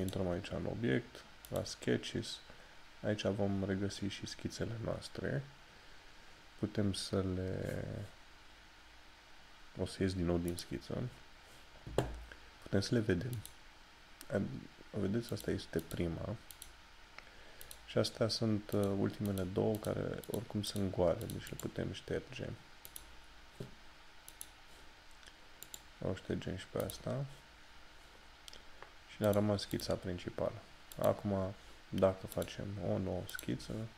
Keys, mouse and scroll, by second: 0.1 click, 10.6 click, 13.4 click.